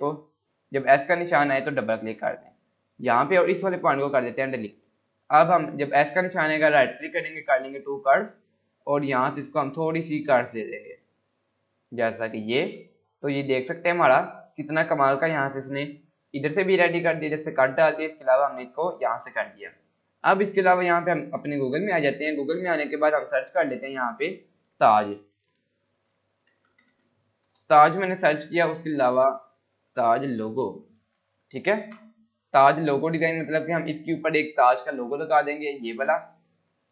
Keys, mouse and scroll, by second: 2.4 click, 3.9 Delete, 5.1 click, 6.4 right click, 7.3 click, 12.6 scroll down 1, 13.2 click, 13.5 scroll down 1, 20.6 click, 25.0-26.8 typing, 27.4 Return, 29.1 click, 29.6-31.1 typing, 31.6 Return, 31.9 Caps_Lock, 33.3 click.